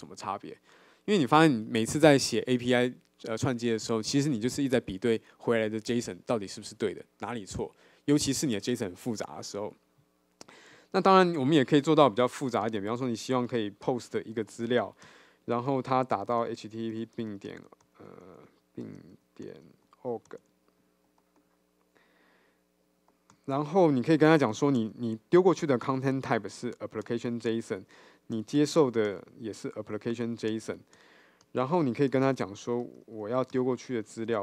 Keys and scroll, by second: 14.0 Return, 25.8 Return.